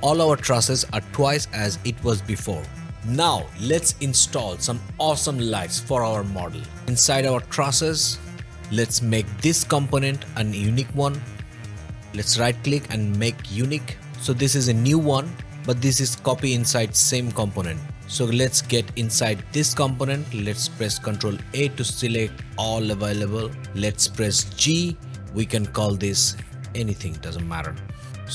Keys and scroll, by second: 21.1 ctrl+a, 22.7 ctrl+a, 24.6 g, 26.7 Return.